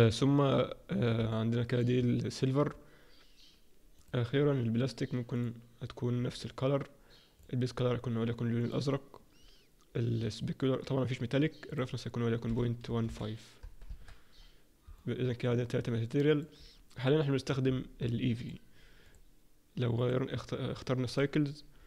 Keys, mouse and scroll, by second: 1.7 click, 4.7 click, 5.4 click, 8.8 click, 11.8 click, 14.9 middle click, 17.6-18.7 scroll up 6, 18.7 click, 18.7-19.6 scroll up 3, 19.6 click, 21.6 click.